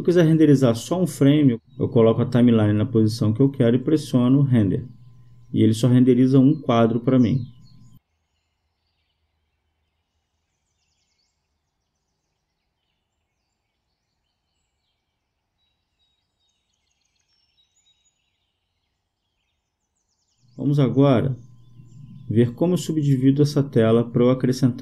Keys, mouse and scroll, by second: 3.3-6.5 drag, 14.0-15.4 drag, 17.7 Escape, 24.4-24.8 drag.